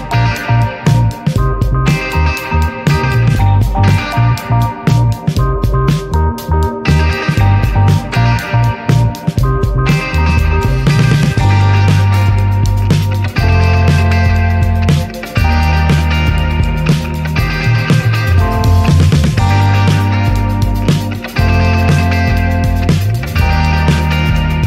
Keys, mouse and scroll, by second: 0.0 ctrl+s, 2.0 click, 2.7 click, 3.1-4.0 middle drag, 4.0 ctrl+s, 4.1 click, 4.7-5.1 scroll down 5, 6.4 click, 7.2-7.7 scroll down 1, 9.2-10.2 drag, 10.4-10.7 scroll down 1, 10.7-11.2 middle drag, 11.2 click, 12.1 ctrl+z, 12.5 click, 13.4 click, 14.4 s, 15.6 click, 17.2 click, 17.9 scroll down 4, 18.1-20.5 middle drag, 20.5-21.6 drag, 21.8 click, 24.0 click.